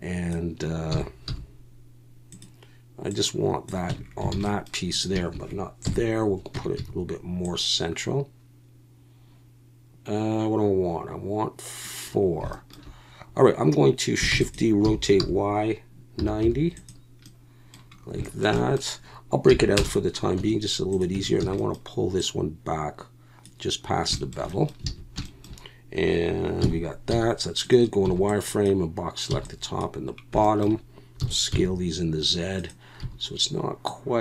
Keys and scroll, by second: 0.9 s, 1.3 y, 3.9 Tab, 4.3 alt+a, 5.8 KP_1, 6.5 Tab, 6.8 a, 14.3-16.4 typing, 19.5 p, 20.4 Tab, 21.1 Tab, 21.4 a, 24.9 alt+a, 26.6 KP_1, 27.1 z, 28.0 b, 29.3 b, 31.5 s, 31.5 z, 33.0 a.